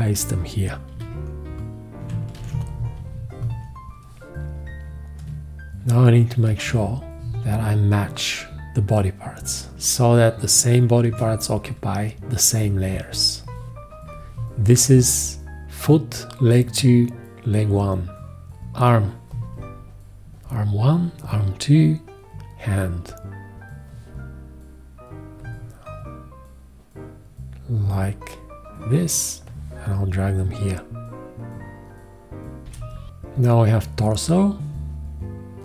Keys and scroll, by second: 0.9 x, 2.4 ctrl+alt+v, 11.0 shift+z.